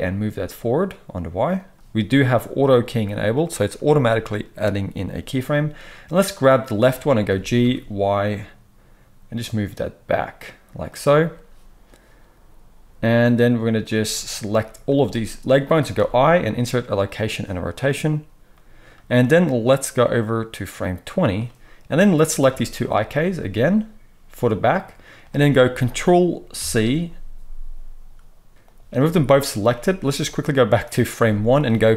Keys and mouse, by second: 6.2 click, 6.3-13.9 middle drag, 7.2 g, 13.9-22.1 drag, 22.1-28.6 middle drag, 26.5 ctrl+c, 28.5 KP_1, 28.5 KP_3, 28.6 click, 28.7-29.2 shift+middle drag, 29.2 shift+click, 29.3-30.2 shift+middle drag, 30.2-31.9 drag.